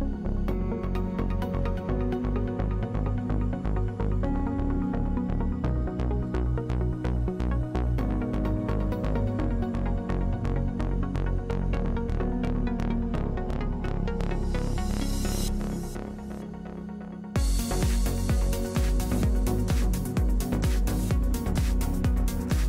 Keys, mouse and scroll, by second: 0.2 n, 0.3 click, 4.3 ctrl+z, 5.8 click, 5.9 middle click, 7.5-16.1 drag, 8.5 ctrl+z, 16.2-17.3 middle drag, 18.1 ctrl+z, 18.4 ctrl+z.